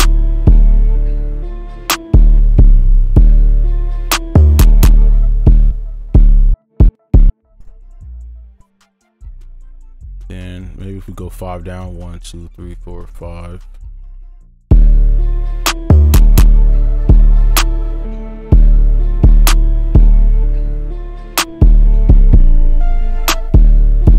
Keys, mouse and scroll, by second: 2.4 space, 3.1 space, 5.0 space, 7.1 double click, 7.6 right click, 8.9 ctrl+click, 9.8 shift+Down, 10.0 shift+Down, 10.2 shift+Down, 10.6 shift+Up, 10.9 shift+Up, 11.1 shift+Up, 11.8 shift+Down, 12.1 shift+Down, 12.4 shift+Down, 12.7 shift+Down, 13.0 shift+Down, 23.3 shift+Up, 23.4 shift+space.